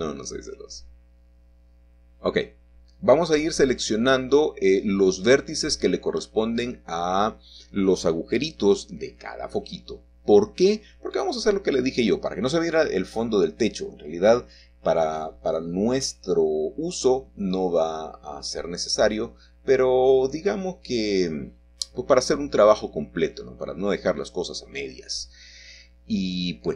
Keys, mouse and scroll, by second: 0.0-2.3 drag, 3.7 click, 5.8 Escape, 6.2 middle click, 7.1-9.1 shift+middle drag, 10.1-11.5 drag, 12.0-13.3 drag, 14.1-15.7 drag, 16.4-17.7 drag, 18.4-19.7 drag, 20.2-21.3 drag, 22.0-23.2 drag, 23.8-25.0 drag, 25.7-26.7 shift+middle drag.